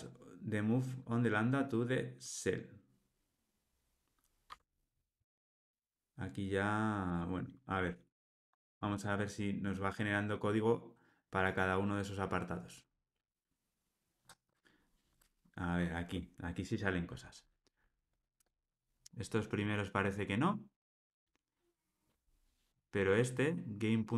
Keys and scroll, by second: 4.5 Tab.